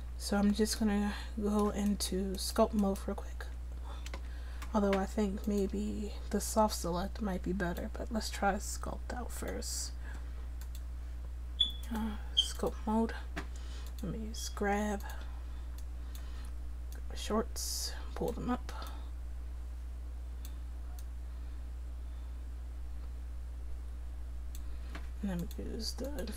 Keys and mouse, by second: 0.2 middle click, 1.9-3.4 drag, 3.4 Tab, 4.1 Tab.